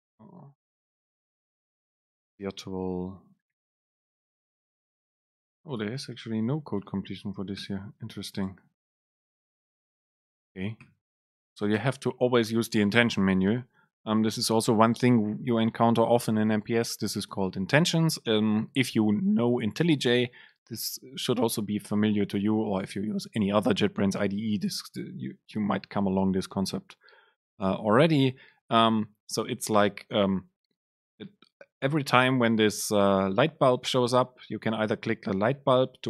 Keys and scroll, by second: 1.0 Right, 3.0 BackSpace, 4.8 super+space, 5.9 BackSpace, 7.2 BackSpace, 7.2 super+space, 8.0 Left, 8.3 super+space, 9.5 Right, 9.8 super+space.